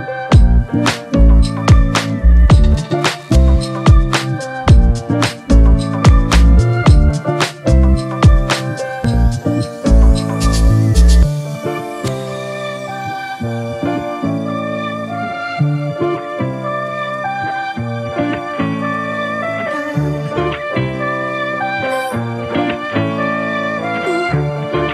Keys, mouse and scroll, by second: 0.3 typing, 1.0 double click, 10.8 double click, 16.5 alt+click, 20.3 double click.